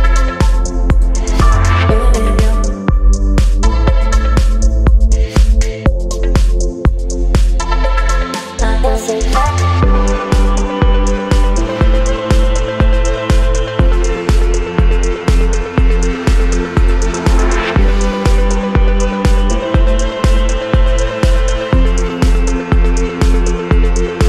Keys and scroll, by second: 1.1 space, 4.9 space, 9.9 space, 10.4 space, 12.8 ctrl+d, 12.9 space, 15.5 ctrl+BackSpace, 17.5 Delete, 18.8 Delete, 19.4 space, 20.0 space, 23.0 Delete.